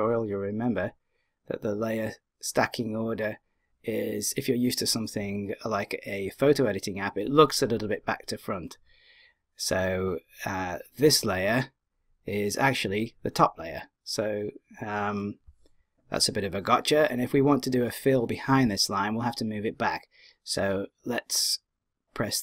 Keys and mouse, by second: 0.5 click.